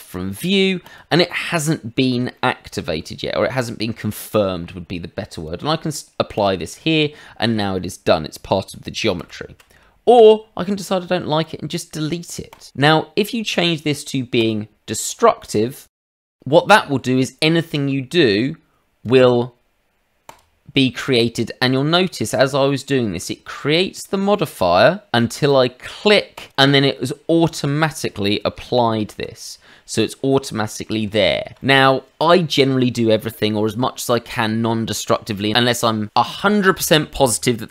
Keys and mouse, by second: 0.3 click, 0.8 click, 2.3 middle click, 5.3 click, 6.3 click, 9.2 ctrl+z, 11.4 click, 12.5 click, 14.4 click, 15.1 click, 15.4 click, 16.0 click, 16.7 shift+middle click, 17.1 middle click, 17.7 click, 20.2 click, 22.2 shift+middle click, 22.6 middle click, 23.2 click, 26.3 click, 28.7 Tab, 30.5 middle click, 31.1 Tab, 31.6 middle click.